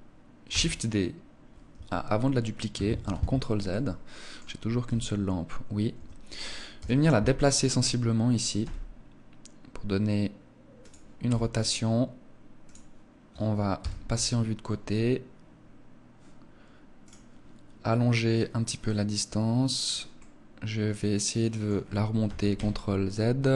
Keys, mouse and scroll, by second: 0.4 shift+d, 2.9 ctrl+z, 3.6 middle click, 4.7 g, 6.6 KP_7, 8.4 g, 10.8 click, 11.1 r, 12.6 click, 13.6 KP_3, 16.9 click, 18.2 click, 20.0 middle click, 22.1 g, 23.4 click.